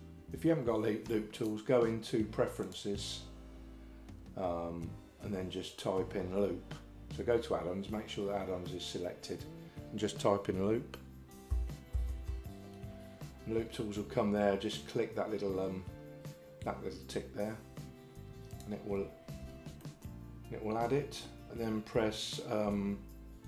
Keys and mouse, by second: 0.5 right click, 1.6-5.2 drag, 19.9-21.3 middle drag.